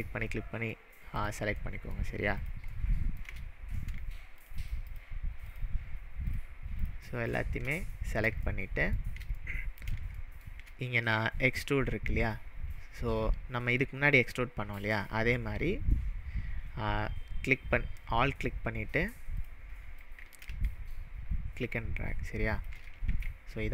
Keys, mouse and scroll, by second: 0.0 shift+drag, 0.4-0.8 shift+middle drag, 1.2 shift+click, 1.7-2.1 shift+middle drag, 2.4 shift+click, 2.8-3.3 shift+middle drag, 3.4-3.8 scroll up 4, 4.4 shift+drag, 4.9 shift+click, 5.5 shift+click, 6.8 shift+click, 7.3 shift+click, 7.8-8.2 scroll down 4, 8.4-9.0 shift+middle drag, 17.5-18.1 drag, 20.0-22.7 alt+drag, 23.1 ctrl+z.